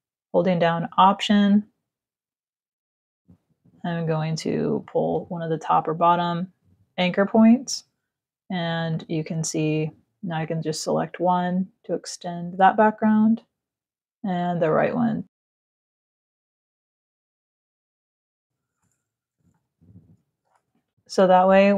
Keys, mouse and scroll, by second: 1.2 alt+click, 8.5 click, 10.8 click, 12.6 click, 13.7 click, 15.7 z, 16.1 click, 16.6 v, 19.3 ctrl+0.